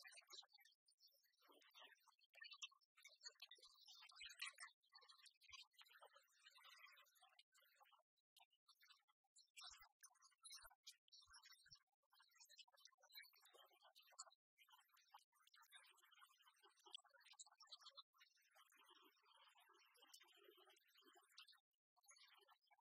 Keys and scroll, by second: 4.1 Return.